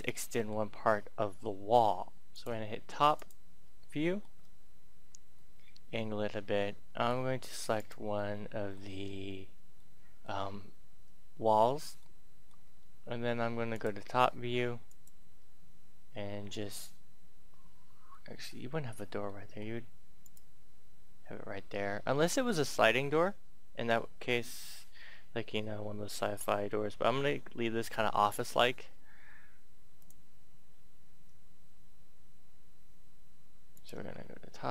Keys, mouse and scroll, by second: 0.1 middle click, 2.2 click, 3.8 shift+middle click, 5.3 middle click, 6.9 Tab, 7.7 right click, 8.1 middle click, 8.9 scroll up 1, 9.7 middle click, 11.9 shift+middle click, 12.6 shift+scroll, 13.7 click, 18.1 middle click, 19.4-19.9 scroll up 1, 19.9 right click, 29.9 click.